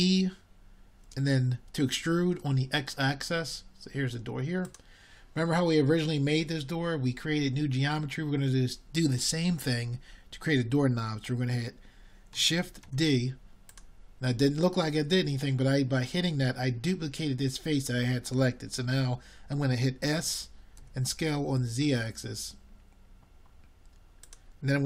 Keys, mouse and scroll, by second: 8.9 e, 22.0 shift+d.